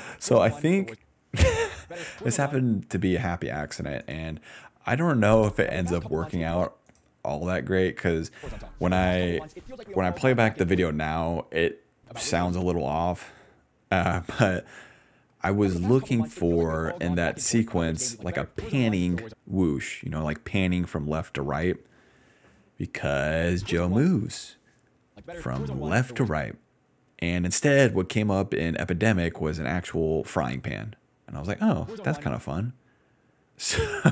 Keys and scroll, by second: 0.0-2.5 typing, 4.6 s, 5.1 ctrl+s, 5.2 space, 5.9 d, 6.6 space, 8.3-10.8 typing, 11.9 space, 12.6 space, 14.7 s, 15.4 ctrl+s, 15.5 space, 17.0 d, 19.2 space, 22.5 d, 23.3 space, 24.0 space, 25.1 space, 26.2 space, 31.7 space, 32.3 space.